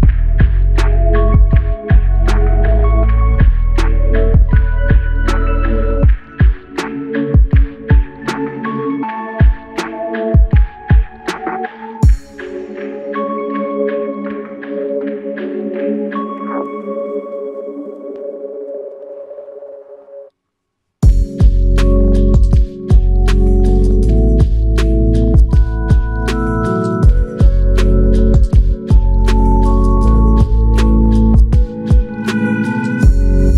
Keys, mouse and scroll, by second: 4.5 alt+click, 20.3 ctrl+click, 20.3 ctrl+click, 21.4 ctrl+click, 22.3 alt+click, 23.6 ctrl+click, 29.0 ctrl+click, 30.1 ctrl+click, 33.2 alt+click.